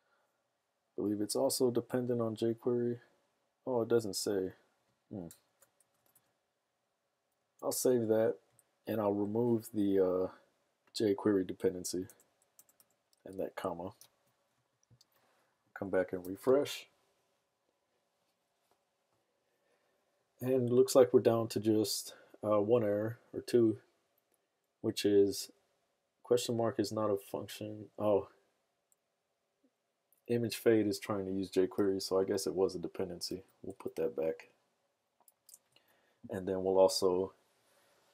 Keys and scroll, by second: 5.8 BackSpace, 5.9 BackSpace, 6.1 BackSpace, 7.6 super+s, 12.1 BackSpace, 12.5 BackSpace, 12.7 BackSpace, 14.2 super+s, 14.7 super+Tab, 16.4 super+r, 32.0 super+Tab, 33.3 super+z, 35.5 super+s.